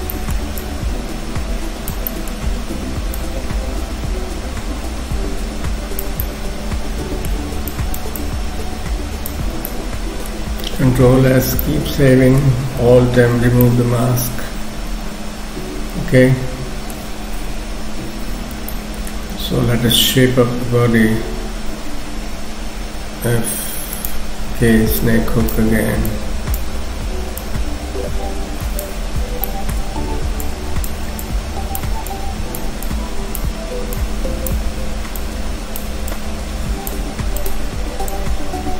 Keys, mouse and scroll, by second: 0.1 middle click, 0.6 click, 2.1 middle click, 2.5-3.2 scroll down 1, 3.2 click, 3.2 scroll down 1, 7.7 shift+click, 8.2 shift+click, 9.5-9.9 shift+scroll down 3, 9.7 middle click, 11.1 ctrl+s, 11.1-11.5 scroll down 2, 11.6 middle click, 13.2 alt+m, 13.7 middle click, 17.5 KP_3, 18.2-18.5 scroll up 1, 18.7 shift+middle click, 24.5 k, 25.1 click, 26.1 click, 27.5 click, 29.1 scroll up 1, 29.5 shift+middle click, 29.9-30.5 scroll up 1, 30.5 click, 31.3 click, 32.1 click, 32.9 click, 34.0 click, 36.1 click, 37.4 click.